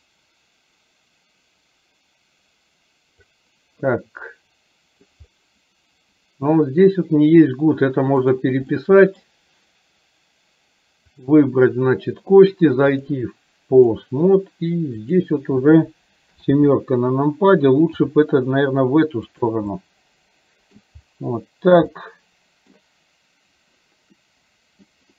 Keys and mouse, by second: 3.9-5.2 middle drag, 8.3 click, 8.8 middle click, 11.2 click, 13.0-14.1 drag, 15.3 click, 16.4 KP_7, 18.0 r, 19.9 middle click, 21.9 middle click, 24.2 middle click.